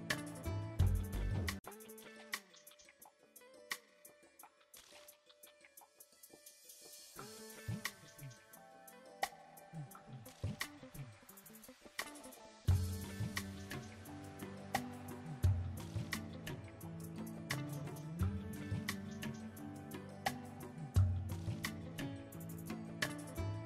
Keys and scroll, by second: 1.3 Tab, 2.1 ctrl+r, 3.6 ctrl+r, 9.4 s, 23.2 Tab.